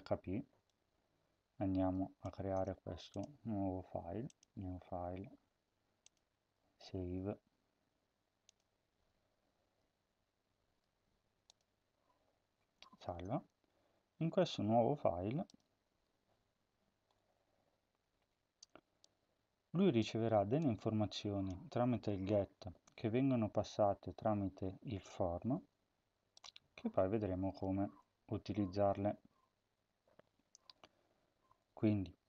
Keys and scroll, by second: 2.2 ctrl+c.